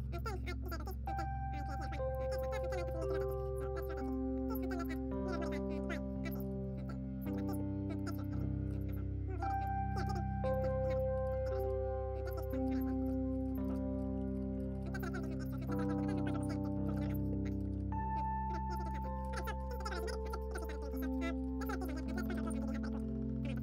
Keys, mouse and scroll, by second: 0.7 click, 0.7 e, 1.6-4.1 middle drag, 2.5-3.6 typing, 5.2-7.3 drag, 6.3 a, 6.4 a, 7.9 e, 8.0 s, 8.6 g, 9.4 a, 9.5 right click, 9.9-11.5 drag, 10.5 right click, 10.8-13.0 middle drag, 10.8-16.9 typing, 11.5-14.0 right drag, 14.0 Tab, 14.4 ctrl+s, 14.5 Tab, 16.4 ctrl+n, 16.7 Tab, 17.5 Tab, 18.0 click, 18.7 right click, 18.7 a, 18.9 Tab, 19.1-21.9 middle drag, 19.2 z, 19.7 ctrl+s, 20.3 KP_7, 21.1 Tab, 21.3 a, 21.3 a, 21.5 right click, 21.9 ctrl+KP_Add.